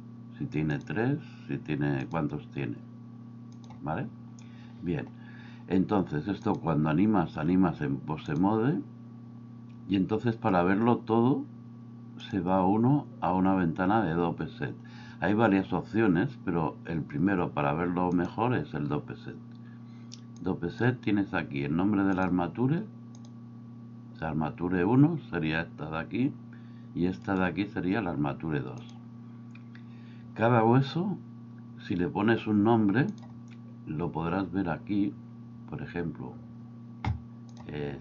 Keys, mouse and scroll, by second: 2.0 click, 6.5-8.4 drag, 12.3-18.3 drag, 20.4 click, 28.9 click, 33.2-34.5 drag.